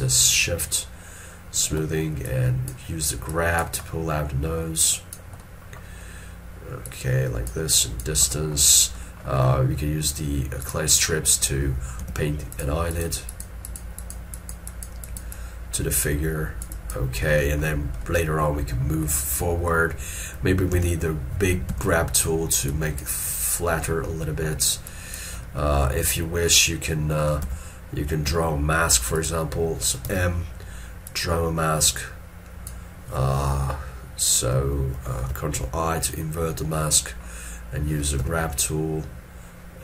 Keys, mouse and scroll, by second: 0.3 shift+click, 4.0 middle click, 12.1 middle click, 24.1 middle click, 37.1 middle click.